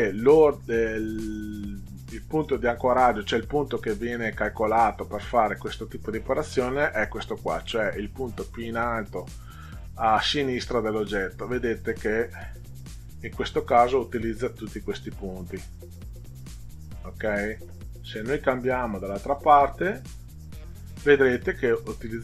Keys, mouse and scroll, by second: 18.7 click, 20.3 click.